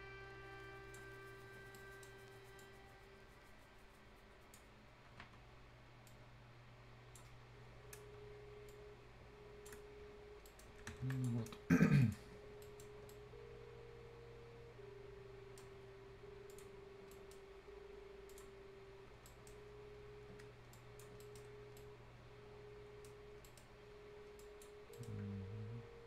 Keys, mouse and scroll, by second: 1.7 right click, 2.6-6.1 drag, 6.1-9.9 drag, 9.9 scroll down 1, 10.5 right click, 10.7 Escape, 11.1 click, 11.4-12.0 scroll down 1, 12.0 click, 12.6 right click, 12.9 scroll down 1, 13.1-16.5 right drag, 16.5 click, 16.8 scroll down 1, 17.1 right click, 18.3 click, 18.6 scroll down 1, 19.3 right click, 19.7 scroll up 1, 20.8 click, 21.2 right click, 21.5 scroll up 1, 21.8-23.3 right drag, 23.3 scroll up 1, 23.5 right click, 23.7 scroll down 1, 24.0 scroll up 1, 24.4 click, 24.8 scroll down 1, 25.0 right click.